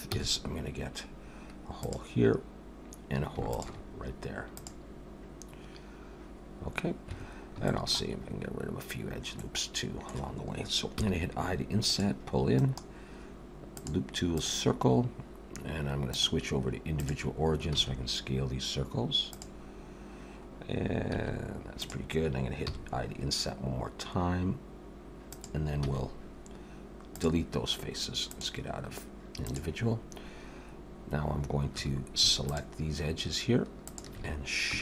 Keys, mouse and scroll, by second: 0.1 c, 7.7 shift+middle click, 8.2 scroll up 1, 9.3 middle click, 11.0 i, 12.6 right click, 16.1 click, 17.7 s, 19.7-20.0 scroll up 2, 21.1 s, 22.7 i, 25.8 x, 28.2 click, 30.7-31.1 scroll up 1, 31.8 2, 32.5 alt+shift+click.